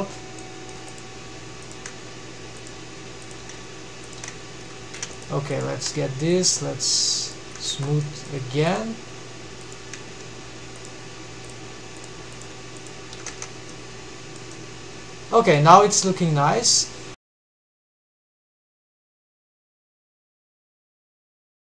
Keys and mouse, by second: 0.2-0.7 middle drag, 0.7 2, 1.5 g, 2.8 click, 3.0 g, 4.4 alt+a, 7.2 1, 7.6 middle drag, 8.3 click, 8.6 shift+v, 9.2 shift+click, 9.7 g, 11.3 g, 11.9 click, 12.1 g, 12.8 Tab, 13.2-14.0 middle drag, 14.1-15.2 middle drag, 15.4-16.8 middle drag.